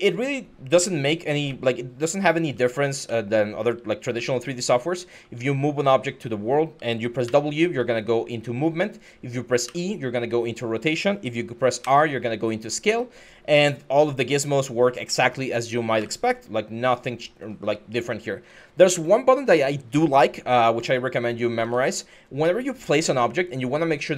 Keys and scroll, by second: 1.5-5.6 typing, 7.0 w, 9.4 e, 11.6 r, 15.8 w, 17.2-18.7 typing, 20.0-21.4 typing.